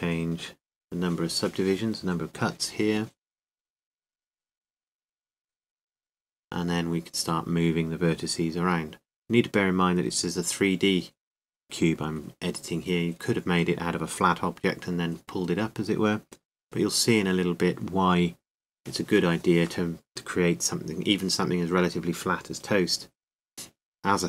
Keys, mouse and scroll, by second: 4.0-5.2 drag.